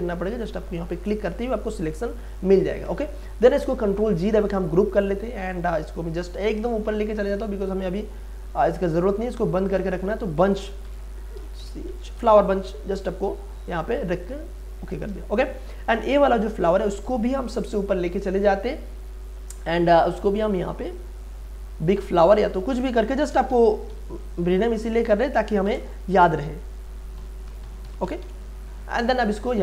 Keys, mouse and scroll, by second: 4.0 ctrl+g, 5.2 scroll up 1, 6.1-9.5 drag, 10.6-12.7 typing, 13.6 click, 15.2 space, 15.4 click, 15.6 space, 16.4-22.2 drag, 23.0-24.4 typing, 25.6 space, 26.9-28.7 typing, 29.4 click.